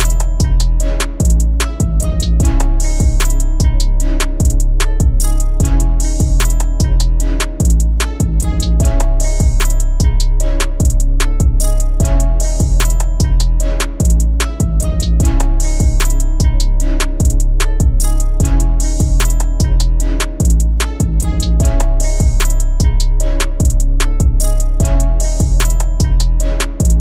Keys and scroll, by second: 2.3 ctrl+d, 9.9 ctrl+e, 13.6 ctrl+d.